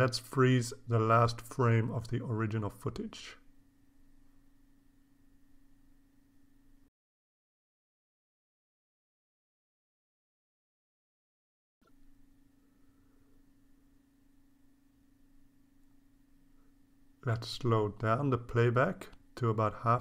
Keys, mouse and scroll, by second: 0.9 shift+click, 1.3-2.0 shift+scroll up 4, 3.0 Delete, 3.6 click, 4.1 scroll down 2, 4.9 scroll down 2, 6.9-9.1 drag, 9.7 click, 10.6-12.2 drag, 12.9 click, 13.7-15.5 drag, 15.7-16.1 scroll up 2, 16.6 scroll down 2, 18.4-20.0 drag.